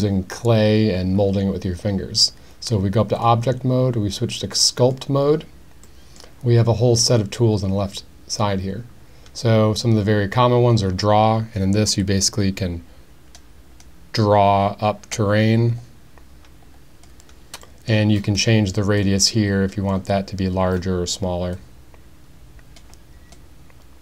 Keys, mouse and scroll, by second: 3.2-4.9 drag, 6.0 middle click, 12.0-17.0 drag, 17.6 middle click, 19.1 click, 21.6-22.8 drag, 23.3-24.0 drag.